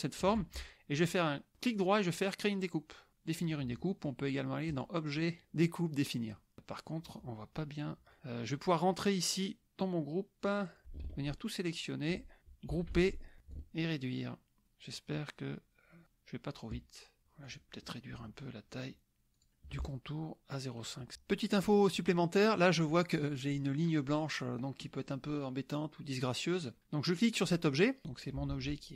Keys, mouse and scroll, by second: 1.5 right click, 4.8 click, 9.4 click, 10.7 click, 11.1 ctrl+a, 12.7 ctrl+g, 13.5-17.2 ctrl+shift+drag, 17.4 click, 19.4 shift+click, 20.7 right click, 27.1 click, 28.0 click, 28.5 ctrl+z.